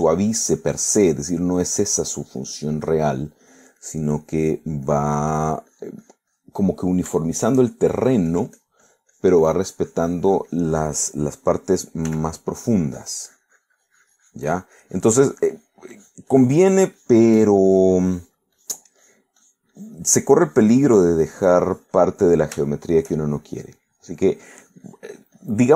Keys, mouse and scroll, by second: 2.2 middle click, 2.8-5.3 drag, 5.3 middle click, 5.9-7.7 drag, 7.7 middle click, 8.3 shift+middle click, 9.0-12.7 shift+drag, 13.1 f, 13.3-18.4 drag, 19.9 click, 21.4-23.3 drag, 23.7 shift+middle click, 24.3-25.7 shift+drag.